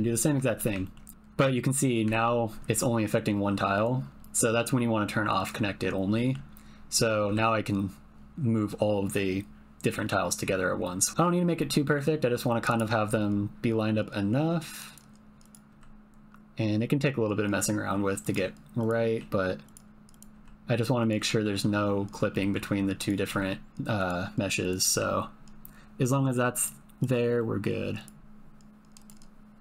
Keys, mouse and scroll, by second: 0.5 shift+middle click, 0.8 ctrl+middle click, 2.1 g, 4.6-5.8 drag, 6.1 middle click, 7.3 g, 11.1 g, 11.5 middle click, 13.0 g, 15.7 g, 18.8 click, 19.1 g, 20.2 click, 20.3 g, 22.4 middle click, 23.0 click, 23.3 g, 24.0 click, 24.8 g, 27.0 click, 27.4 middle click, 28.1 click, 28.2-29.6 typing, 28.4 shift+middle click, 28.9 click.